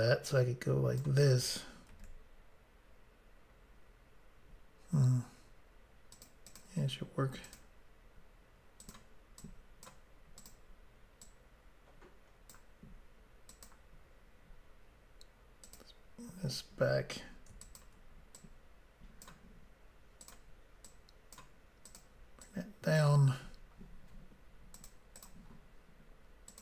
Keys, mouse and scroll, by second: 1.9 ctrl+r, 6.2 click, 6.3 click, 6.5 click, 6.6 double click, 7.5 double click, 7.6 double click, 8.8 click, 8.9 click, 9.4 click, 10.4 click, 10.5 click, 11.3 click, 13.5 click, 13.7 click, 15.7 click, 15.8 click, 17.7 shift+click, 17.8 shift+click, 18.4 click, 20.3 click, 20.4 click, 20.9 click, 21.9 click, 22.0 click, 22.5 click, 24.8 click, 24.9 click, 25.2 click, 25.3 double click, 26.5 double click.